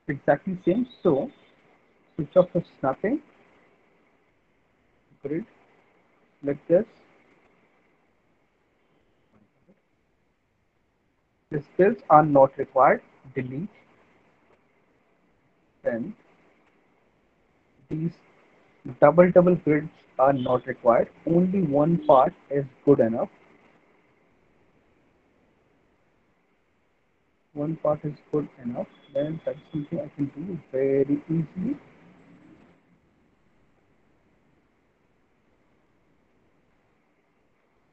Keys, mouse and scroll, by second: 2.8 click, 4.1 click, 4.8 click, 5.9 ctrl+click, 6.1 ctrl+click, 8.1 alt+click, 8.8 middle click, 10.2 alt+middle click, 11.2 click, 12.4 Delete, 15.1 alt+middle click, 15.7 middle click, 18.0 click, 19.0 Delete, 21.3 alt+middle click, 21.9 middle click, 22.8 middle click, 23.5 middle click, 23.7 middle click, 25.6 middle click, 26.2 middle click, 28.1 alt+middle click, 28.8 middle click, 31.8 alt+middle click, 32.4 middle click, 33.0 alt+middle click, 33.5 middle click, 35.3 alt+middle click, 35.7 middle click, 35.9 middle click, 36.7 alt+middle click, 37.1 middle click, 37.5 alt+middle click.